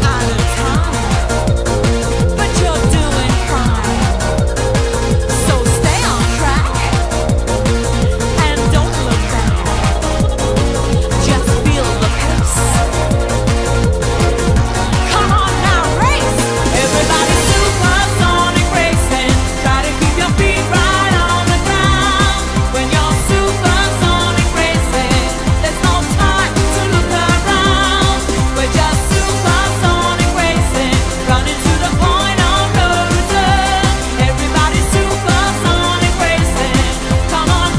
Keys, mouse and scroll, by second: 1.3 KP_1, 6.0-7.2 scroll up 5.